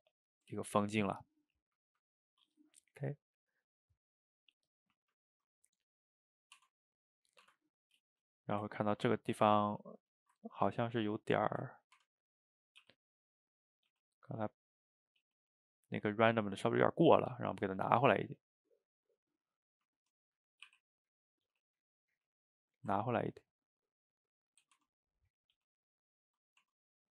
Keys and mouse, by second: 0.1-6.6 middle drag, 6.6 Tab, 7.4 Tab, 7.8-8.2 middle drag, 8.5 shift+right click, 8.8-10.2 middle drag, 10.2 shift+right click, 10.4-11.5 ctrl+middle drag, 11.5 click, 12.0 Tab, 12.6 click, 12.8 g, 13.8 click, 13.9 g, 14.4-15.3 middle drag, 15.3 g, 15.8-17.6 middle drag, 17.6 click, 17.8-20.7 middle drag, 20.7 r, 21.5 g, 22.7-24.8 ctrl+middle drag, 24.8 Tab, 25.3 click, 25.6 g, 26.4 middle drag, 26.7 Tab, 27.0-27.1 ctrl+middle drag.